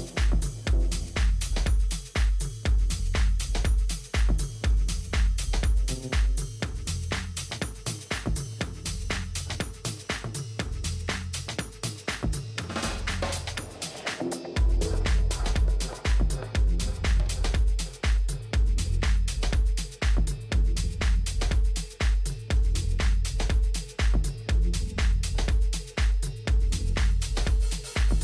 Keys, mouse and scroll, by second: 3.3-4.7 middle drag, 6.4 a, 6.8 a, 7.8 Tab, 10.5 middle click, 10.8-13.2 middle drag, 16.0 KP_7, 18.1-19.5 middle drag, 19.5 Tab, 20.2 a, 20.5 a, 23.1 ctrl+r.